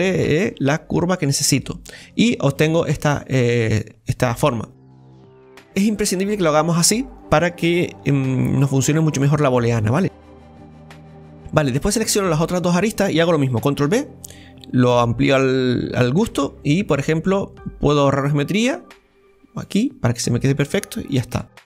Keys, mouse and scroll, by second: 1.5 click, 2.2-5.2 middle drag, 5.4-6.0 scroll up 1, 6.0-7.1 shift+middle drag, 7.1 right click, 8.5 alt+shift+right click, 9.2-10.2 middle drag, 10.2 alt+shift+right click, 10.7-13.9 middle drag, 13.9 ctrl+b, 19.7 click, 20.2-21.4 middle drag, 21.4 Tab.